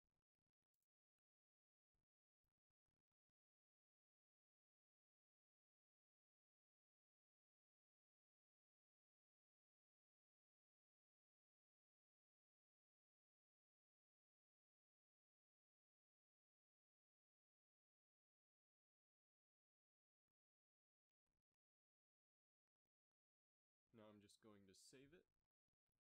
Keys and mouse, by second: 0.2 KP_1, 6.7 click, 12.9 KP_3, 19.0-20.6 drag, 25.1-26.0 middle drag.